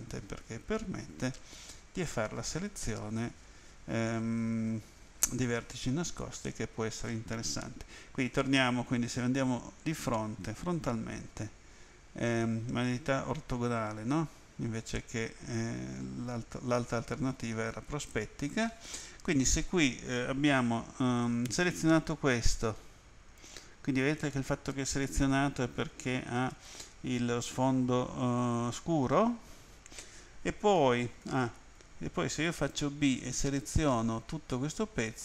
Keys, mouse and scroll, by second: 6.5 middle click, 9.3 End, 22.1 click, 31.3 a, 32.7 b, 33.2 click.